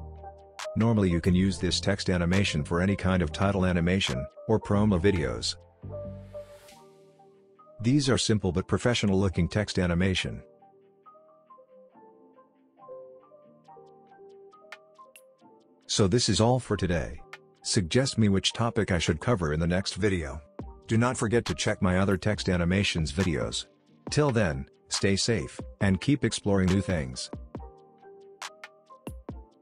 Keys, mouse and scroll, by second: 5.6 space, 10.1 click, 12.5 space, 14.8-15.4 typing, 16.0 click, 17.6 n, 18.4-19.1 click, 19.0 space, 20.1 typing.